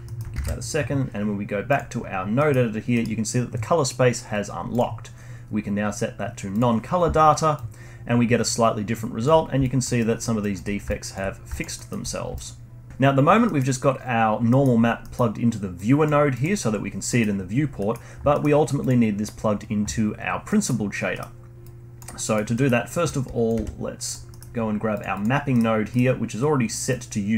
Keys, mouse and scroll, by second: 0.0 middle click, 0.3 ctrl+alt+s, 2.3 middle click, 2.6 scroll up 1, 2.9-4.7 middle drag, 4.7-9.3 drag, 9.3 scroll up 1, 9.6-9.9 alt+drag, 9.9-10.4 alt+middle drag, 10.4-11.3 alt+drag, 11.3 scroll down 2, 11.5 alt+drag, 11.7-12.1 alt+middle drag, 12.1 scroll down 1, 12.3-12.9 alt+drag, 13.4-14.1 middle drag, 14.1-14.5 scroll down 1, 14.5 middle click, 14.8 scroll down 1, 15.0-15.7 middle drag, 15.7 click, 16.3 click, 17.0-18.8 middle drag, 18.8 click, 20.4-21.6 middle drag, 21.6 click, 22.1 middle click, 23.0 click, 23.5 g, 24.2-24.9 middle drag, 24.9 drag, 25.1 click, 25.5-26.8 middle drag, 26.8 click.